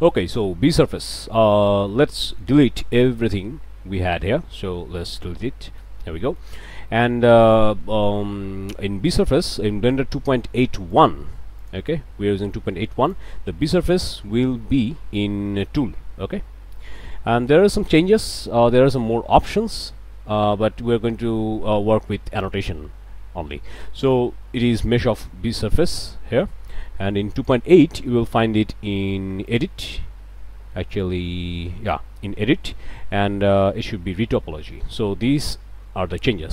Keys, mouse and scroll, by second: 0.2 middle click, 0.6 click, 1.9 Tab, 2.2 click, 4.8 Delete, 5.5 scroll up 2, 5.7 middle click, 6.2 shift+middle click, 6.5-6.8 shift+scroll down 2, 6.9 shift+middle click, 7.4 scroll up 2, 7.5 middle click, 7.8 middle click, 10.9 click, 11.6 click, 13.0 click, 13.5 n, 15.0 scroll down 2, 15.3 scroll up 2, 18.4-19.6 drag, 27.4 click, 29.5 click, 30.8 click, 31.1 Tab, 32.2 Tab, 35.9 middle click.